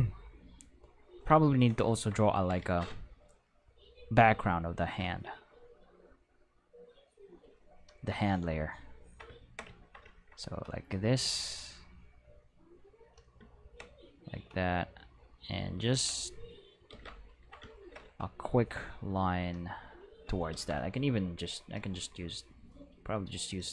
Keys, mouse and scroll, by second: 0.4 click, 5.9-7.9 drag, 11.4-13.0 drag, 16.1 click, 16.9 ctrl+z, 19.0 click, 20.5 ctrl+z, 21.6 click.